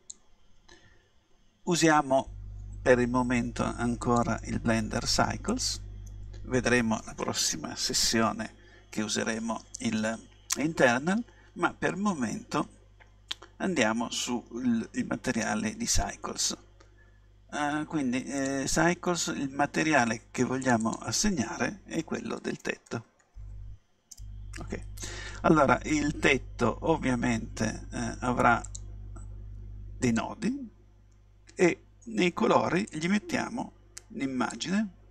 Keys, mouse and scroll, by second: 4.0-5.8 drag, 18.4-23.1 drag, 23.1 t, 30.1-32.0 drag, 32.9-35.1 drag.